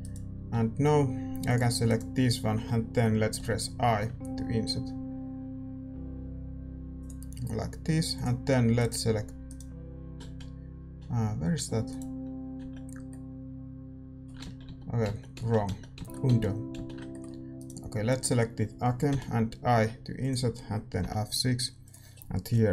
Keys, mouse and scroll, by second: 0.4 a, 1.4-3.3 drag, 3.3 i, 7.2 a, 8.1-10.1 drag, 8.7-14.4 right drag, 10.1 z, 10.8 z, 12.5 z, 13.1-15.0 middle drag, 14.4 ctrl+z, 15.0 ctrl+z, 15.9 ctrl+z, 16.7 ctrl+z, 17.0-22.7 middle drag, 17.5-19.5 right drag, 19.0 i.